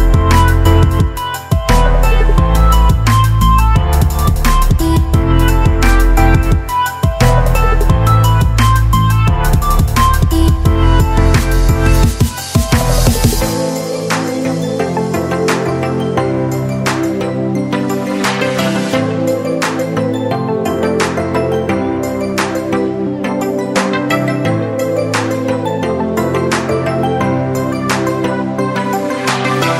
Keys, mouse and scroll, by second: 3.3 Up, 3.5 Right, 4.0 Up, 4.3 Right, 6.6-8.5 drag, 8.7 Up, 10.0-11.9 drag, 12.4 Down, 12.8 Left, 13.3 Up, 13.6 Right, 14.7 Down, 15.1 Right, 15.4 Up, 16.2 Left, 17.0 click, 19.6 ctrl+scroll up 2, 20.8-24.4 drag, 25.0 Left, 25.6 Up, 26.6 click, 27.7 ctrl+alt+scroll down 1, 29.1-29.7 drag.